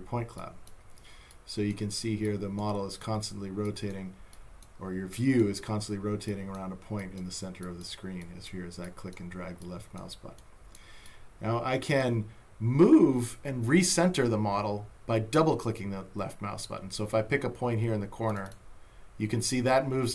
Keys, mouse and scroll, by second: 6.3 click, 18.3 click.